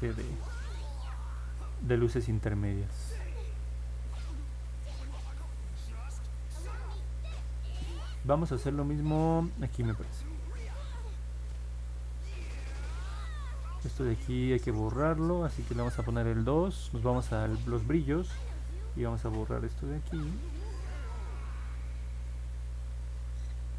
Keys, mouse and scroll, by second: 0.0 click, 0.4 click, 0.8 click, 1.3 click, 1.9 click, 2.3 click, 2.7 click, 9.7 click, 10.0 click, 10.3 click, 10.8 click, 11.2 click, 11.5 click, 12.0 click, 12.3 click, 12.6 click, 18.7 click, 19.1 click, 19.6 click, 20.4 click, 20.7 click, 21.0 click, 21.3 click, 21.6 click, 21.9 click, 22.2 click, 22.5 click.